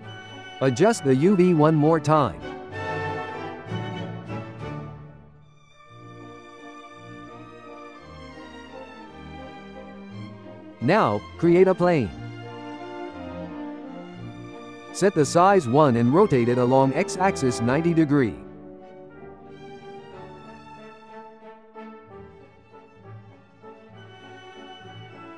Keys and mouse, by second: 0.1 a, 0.6 s, 1.3 g, 2.5 ctrl+shift+middle click, 3.1 s, 4.2-6.0 typing, 6.4 Tab, 7.7 click, 9.4-10.3 shift+middle drag, 10.3-11.8 drag, 11.7 shift+a, 13.5-15.8 drag, 16.9-20.5 drag, 20.5 shift+middle drag, 20.8 g, 22.0-23.3 drag, 23.3 g.